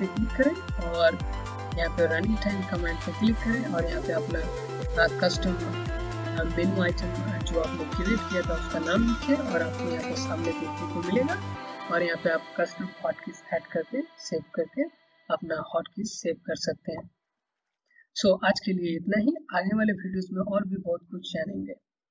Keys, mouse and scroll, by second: 2.9 click.